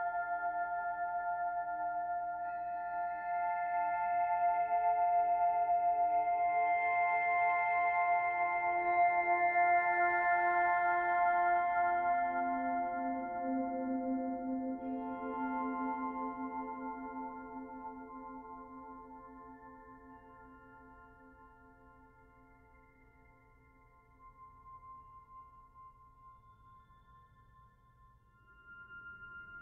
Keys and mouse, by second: 6.4 click, 7.9-9.1 drag, 10.1 click, 14.3 Return, 17.8 click, 18.7 click, 19.7 click, 22.5 click, 23.6-24.9 drag, 25.6 click, 27.1 click.